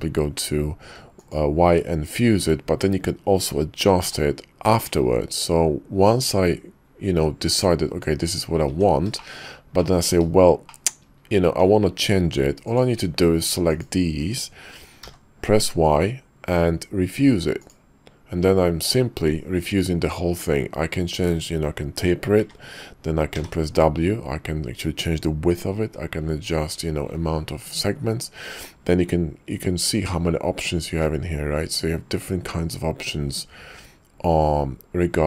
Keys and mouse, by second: 8.6 Tab, 9.2 shift+middle click, 9.8 click, 10.6 shift+drag, 11.5 Tab, 12.6 click, 15.0 y.